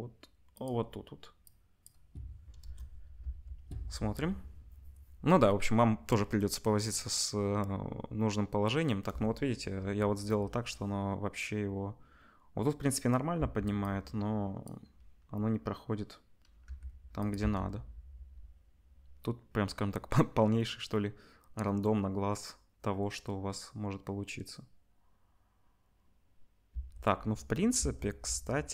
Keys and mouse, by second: 0.7-1.4 middle drag, 1.9-17.4 drag, 2.6 KP_0, 3.2 space, 13.3 space, 16.6 g, 17.4-28.7 middle drag, 17.4 space, 26.8 space, 27.7 space.